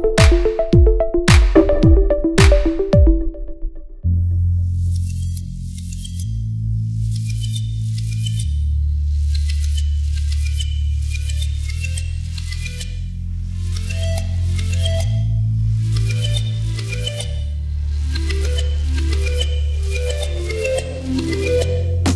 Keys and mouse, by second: 1.3 shift+s, 2.2 shift+d, 3.0 KP_1, 3.5 g, 5.5 r, 6.3 g, 8.2 x, 8.7 click, 9.1 middle click, 9.1 g, 9.7 click, 9.8-22.1 middle drag, 10.2 g, 13.8 shift+d, 18.0-22.1 shift+drag.